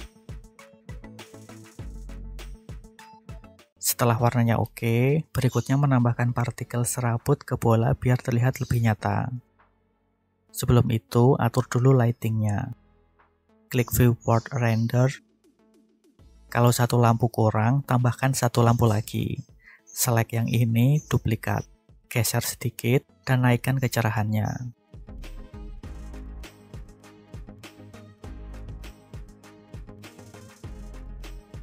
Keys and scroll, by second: 20.2 shift+d, 22.7 x, 27.1 g, 27.4 y, 31.4 BackSpace.